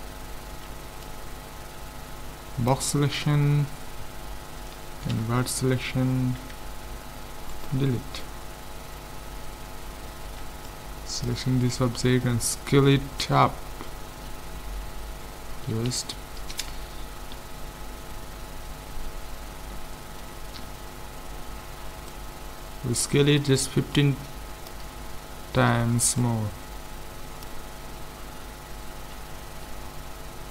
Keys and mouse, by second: 0.6 b, 5.1 ctrl+i, 6.4 x, 8.2 middle click, 10.3 b, 14.2 s, 22.1-23.9 drag, 24.0-25.6 drag, 25.6 middle click, 26.2-28.1 drag, 28.1-30.5 middle drag, 29.0 z.